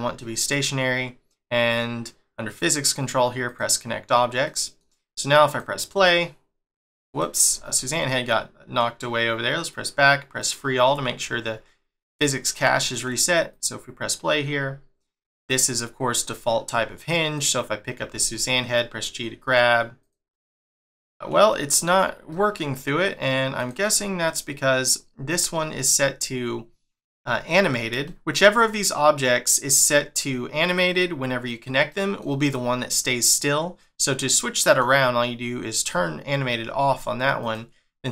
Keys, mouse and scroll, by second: 3.4 click, 4.4 middle click, 5.5 click, 7.1 click, 7.5 scroll down 2, 8.0 middle click, 9.7 click, 10.4 click, 11.0 scroll up 1, 12.4-12.7 scroll up 3, 12.7 shift+middle click, 13.5 click, 15.3 middle click, 17.4 click, 18.0 g, 20.3 middle click, 21.1 scroll up 4, 21.5 shift+middle click, 23.6 click, 24.3 click, 25.4 middle click, 28.0 shift+middle click, 31.9 middle click, 33.4 middle click, 35.8 click, 37.4 click.